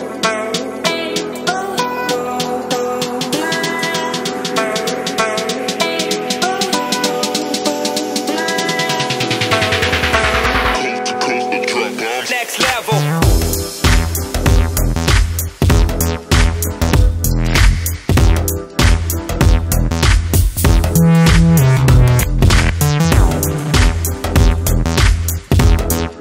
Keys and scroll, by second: 1.8-2.5 typing, 6.2-6.9 typing.